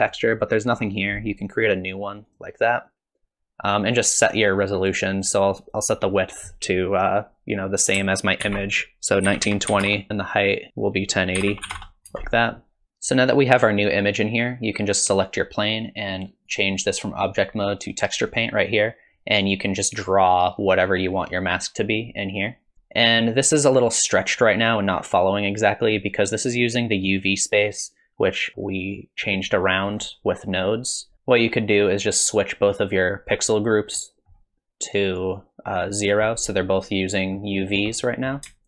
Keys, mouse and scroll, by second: 0.8-1.1 scroll up 2, 2.3 click, 6.0 click, 15.1 click, 16.5 click, 19.4 click, 22.7 ctrl+z, 23.0 click, 31.1 middle click, 31.1 click, 32.6 click, 34.0 middle click, 35.4 click, 36.3 middle click, 37.7 scroll up 2, 37.9 middle click.